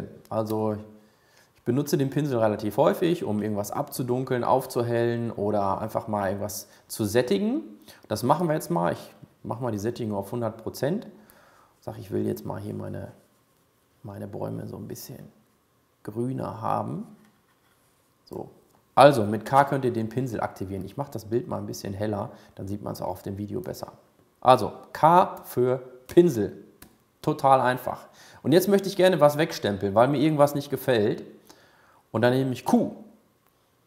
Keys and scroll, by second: 1.1 k, 33.0 q.